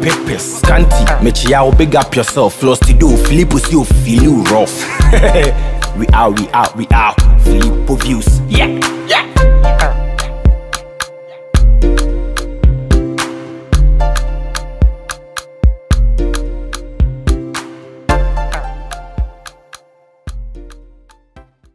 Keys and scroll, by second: 19.4 Return.